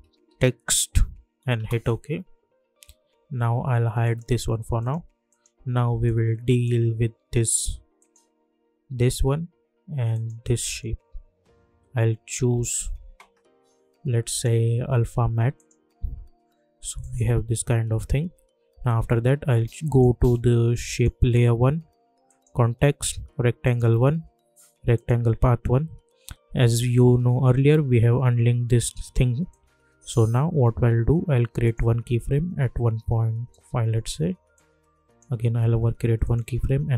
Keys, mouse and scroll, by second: 0.0-0.9 typing, 1.5 Return, 4.0-8.0 drag, 14.3 click, 19.8 click, 29.4-36.9 drag.